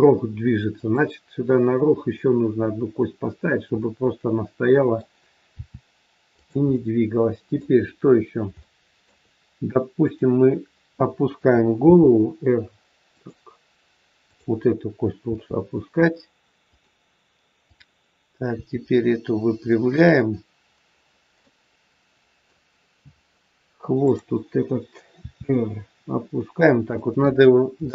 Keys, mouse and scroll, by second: 3.7 middle click, 5.5 r, 6.6 middle click, 7.7-8.3 scroll down 4, 8.6 shift+middle click, 10.0 click, 11.8 r, 14.2 click, 15.2 r, 17.5 click, 18.5 r, 21.0-21.3 scroll down 1, 21.3 middle click, 24.0 click, 25.1 r, 27.5-27.8 scroll up 2, 27.7 shift+middle click.